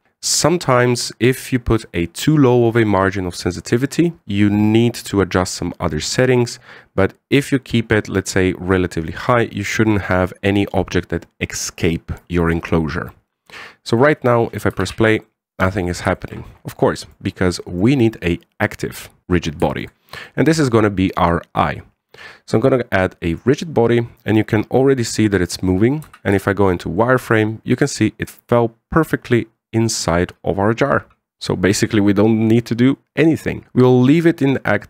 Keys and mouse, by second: 13.8-14.7 middle drag, 15.6 alt+a, 16.0-16.7 middle drag, 16.9 shift+middle drag, 17.7 middle click, 18.5 right click, 18.8-19.2 middle drag, 20.4 shift+middle drag, 21.0 middle drag, 24.0 click, 26.8 z, 27.2 shift+middle drag, 27.8-28.1 middle drag, 29.0-30.9 middle drag.